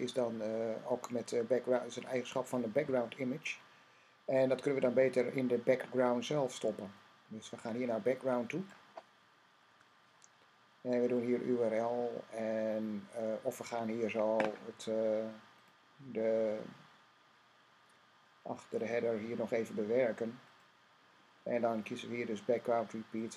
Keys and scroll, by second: 10.4 Right.